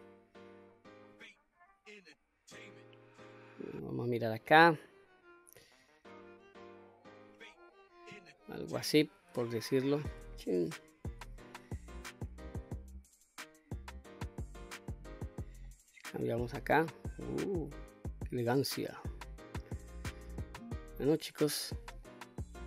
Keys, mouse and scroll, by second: 1.4 click, 2.2-3.7 middle drag, 4.4-7.6 drag, 7.9-8.4 scroll down 1, 8.4-8.8 middle drag, 9.5-10.2 shift+middle drag, 10.4-10.8 scroll down 1, 10.8-11.6 middle drag, 12.4-14.9 drag, 15.7-22.1 middle drag.